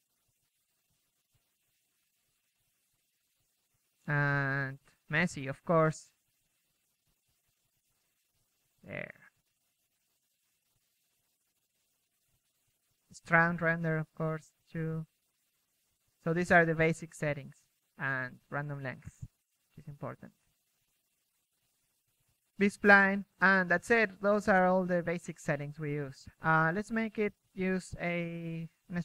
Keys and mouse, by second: 0.0-0.8 typing, 3.4-5.6 middle drag, 4.1 KP_3, 4.3 KP_1, 4.9 KP_3, 9.0 KP_1, 9.4-19.3 drag, 9.9 KP_1, 21.3 click, 22.5 KP_3, 26.3 middle click.